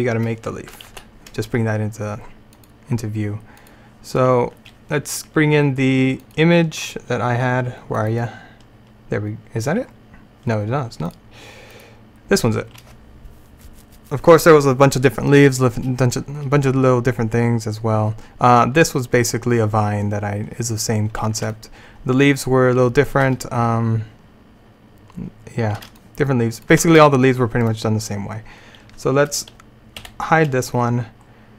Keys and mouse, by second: 0.9 alt+h, 2.6-8.3 drag, 10.0 typing, 10.1-11.1 middle drag, 11.1-21.6 drag, 11.1 typing, 22.6 typing, 30.1 h.